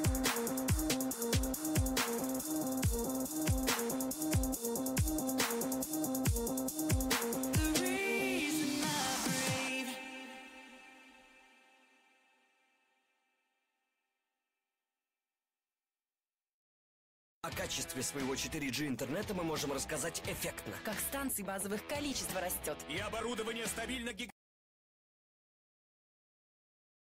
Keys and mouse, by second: 0.0-5.8 drag, 2.0-5.8 right drag, 6.7-9.1 drag, 9.1 Tab, 15.5 Tab, 16.0 Tab, 17.2 Tab, 19.1 KP_1, 21.1 z, 21.6 a, 22.8 c, 25.4 c, 26.7 z.